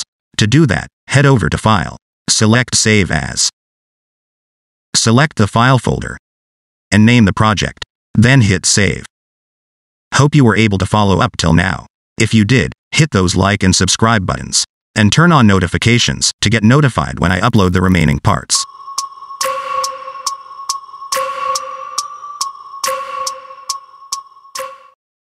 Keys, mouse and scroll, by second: 2.3 click.